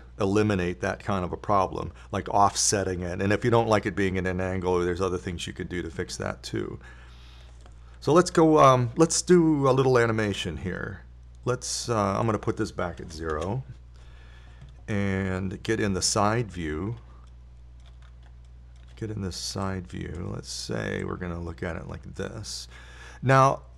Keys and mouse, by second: 9.6 KP_7, 17.3 KP_3, 21.1-23.6 drag.